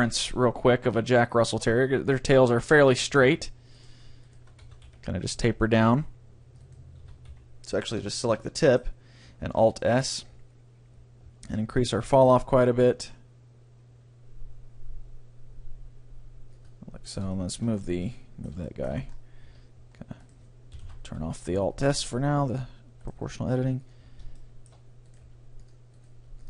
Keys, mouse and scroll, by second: 3.3 s, 3.5 click, 4.7 a, 4.9 c, 6.7-8.4 drag, 7.0 a, 7.3 c, 8.1-9.9 middle drag, 9.5 alt+s, 16.7-18.5 drag, 17.1-18.9 right drag, 17.3-18.9 middle drag, 19.1-21.1 middle drag, 19.5 g, 20.5-22.2 right drag, 20.9 alt+o, 21.5 g, 22.7-24.5 drag, 23.1-24.5 right drag, 23.3 g, 24.2 middle click, 25.0 right click, 25.2 click, 25.2 middle click, 25.3 g, 25.6 click, 25.6 middle click, 25.6 right click, 26.2 g.